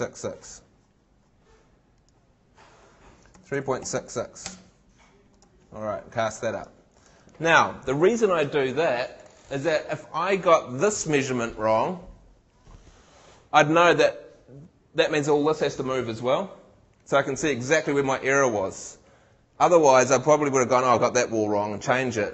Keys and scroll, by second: 3.3 3.